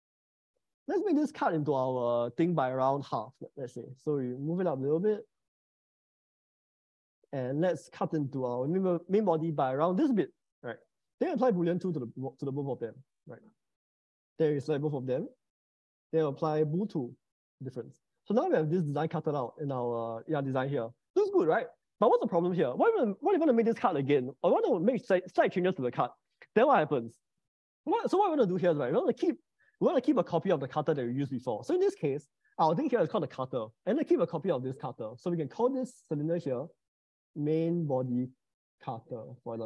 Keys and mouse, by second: 0.5 click, 4.5 m, 6.3 g, 6.5 z, 10.7 click, 11.3 middle click, 16.3 ctrl+shift+b, 17.8-19.1 middle drag, 19.1 middle click, 32.1 ctrl+z, 35.8 click, 36.0-39.6 drag.